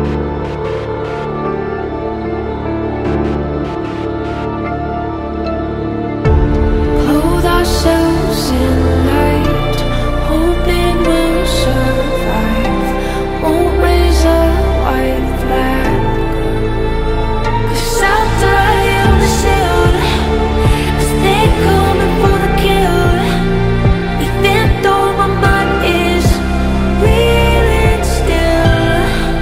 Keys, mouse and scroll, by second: 8.4 alt+scroll down 1, 8.9 alt+scroll up 1, 13.2-13.9 scroll up 1, 13.9-15.6 scroll down 1.